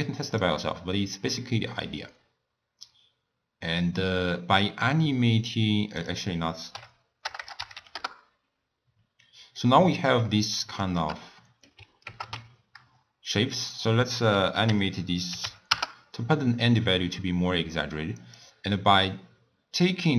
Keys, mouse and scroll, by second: 0.4-3.5 drag, 6.1-7.4 drag, 7.4 BackSpace, 9.1 scroll down 4, 9.3 scroll up 1, 9.6-12.1 middle drag, 12.1 ctrl+alt+KP_0, 13.5-16.6 drag, 18.4-20.1 drag.